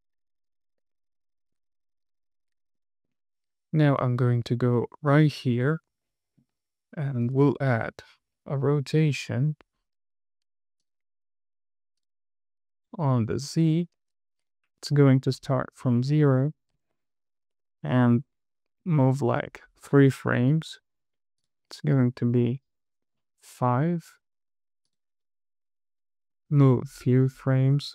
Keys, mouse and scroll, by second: 0.0 click, 0.1 shift+click, 0.5 shift+super+c, 0.9 super+z, 1.1 scroll down 4, 1.2 shift+middle click, 1.9 scroll up 2, 2.0 shift+middle click, 2.1 click, 2.2 r, 2.6 super+z, 2.7 scroll down 2, 3.1 shift+middle click, 4.3 click, 4.9-5.3 scroll up 2, 5.5 shift+middle click, 5.8 scroll up 3, 6.4 shift+middle drag, 7.6 click, 9.7 click, 11.2 click, 11.6-12.4 drag, 13.4 click, 14.3 super+z, 15.8 click, 17.6 KP_Add, 17.8 KP_Add, 17.9 KP_Add, 18.2 KP_2, 18.3 Right, 18.7 KP_2, 19.3 Right, 19.3 KP_2, 21.7-23.4 drag, 25.3 click, 26.1 KP_2, 26.2 Right, 26.3 KP_2, 26.4 Right, 26.6 KP_2, 27.6-27.9 drag.